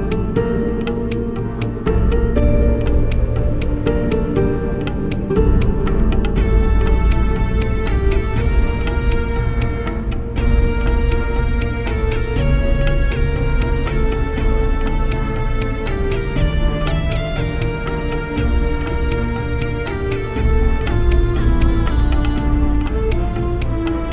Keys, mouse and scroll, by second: 1.5 click, 4.5-5.8 middle drag, 5.8 click, 7.4-9.8 middle drag, 8.1-11.3 drag, 12.2 click, 14.7 click, 21.1 click, 23.6 middle click.